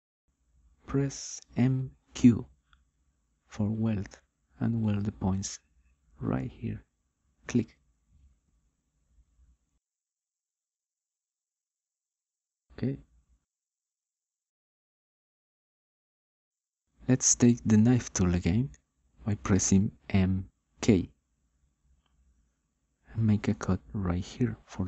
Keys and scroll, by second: 1.8 m, 2.6 q, 13.6 9, 22.3 m, 22.9 k.